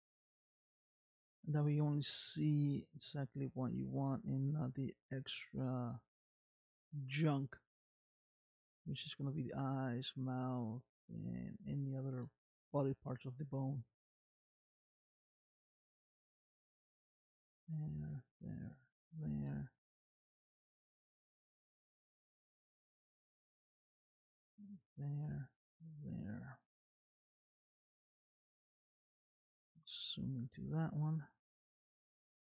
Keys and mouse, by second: 0.4 e, 1.3 e, 2.3 middle click, 3.8 middle click, 4.6 e, 6.1 middle click, 7.3 click, 8.2 e, 9.9 e, 11.0 e, 12.3-13.9 middle drag, 14.6 click, 15.3 middle click, 16.5 e, 17.5 e, 18.6 e, 19.5-20.5 middle drag, 21.0 click, 21.8-23.2 middle drag, 23.6 e, 24.6 e, 25.7-28.3 middle drag, 29.7 KP_Decimal, 32.0 middle click.